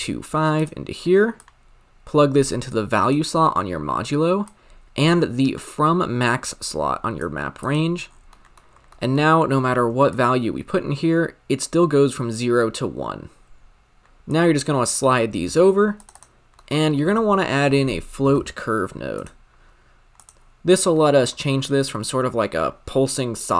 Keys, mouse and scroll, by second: 0.5-3.1 drag, 4.5 drag, 7.6 click, 8.1-8.5 scroll down 7, 8.5 middle click, 8.7 scroll up 1, 8.9 middle click, 9.2-10.3 scroll up 10, 10.3-13.2 shift+drag, 14.2-14.6 drag, 16.1-19.2 drag, 19.2 shift+a, 21.0 middle click, 21.2-23.3 scroll up 6.